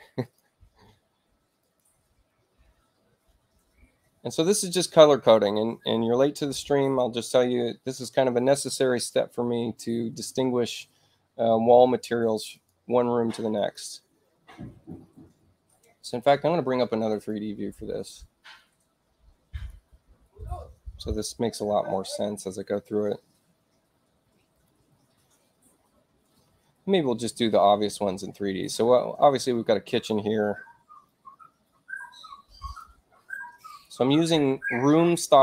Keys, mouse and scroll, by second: 0.1 click, 1.5 click, 3.8 middle click, 3.8 scroll up 2, 12.4 click, 13.4 click, 17.0 click, 19.4 click, 24.5 click, 32.6 click, 33.6 click.